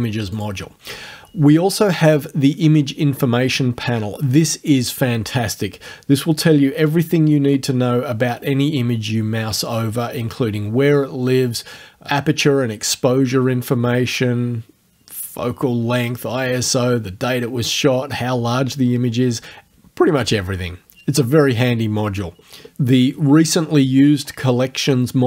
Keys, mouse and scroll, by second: 0.4 click, 2.1 click.